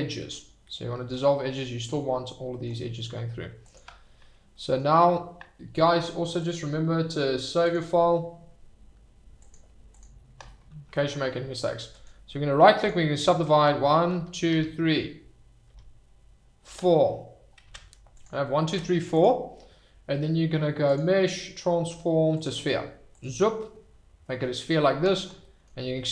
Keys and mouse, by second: 0.2-1.1 middle drag, 1.9 middle click, 3.7 alt+click, 4.5 middle click, 6.4-7.8 drag, 12.0 click, 14.1 shift+r, 14.5 shift+r, 17.6 Tab, 18.7 Tab, 21.0-22.6 drag, 23.1 click, 24.2 middle click, 25.4 middle click.